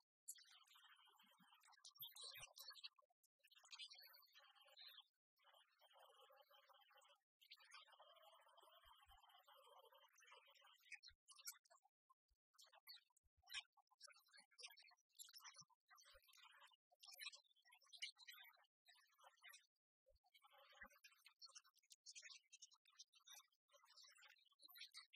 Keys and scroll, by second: 17.4 alt+Right, 20.4 alt+Right, 23.5 alt+Right.